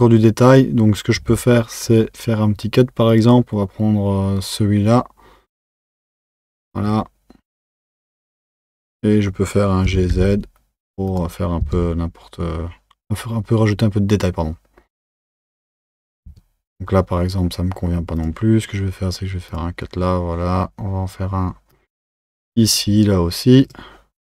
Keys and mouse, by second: 1.2 Tab, 3.1-8.1 drag, 8.1 1, 8.4 click, 9.9 g, 11.6 Tab, 16.3 Tab, 18.2-24.3 drag.